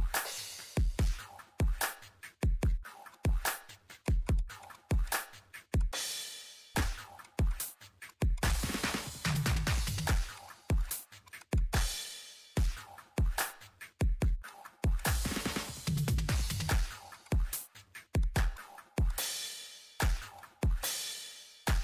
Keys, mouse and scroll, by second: 1.6 ctrl+middle click, 3.1 click, 7.8 Delete, 8.0 click, 9.4 click, 10.1 click, 10.9 click, 12.4-14.4 typing, 13.1 middle click, 13.4 click, 14.4 click, 14.7 middle click, 14.9 click, 15.7 shift+8, 16.4 scroll up 1, 16.6 ctrl+middle click, 17.1 click, 17.6 scroll up 1, 18.2 click, 18.8 Escape, 19.1 click, 19.2-20.1 typing, 20.4 click, 20.4 scroll up 1, 20.6 ctrl+middle click, 20.9 scroll down 1, 21.2 ctrl+middle click, 21.4 scroll up 1.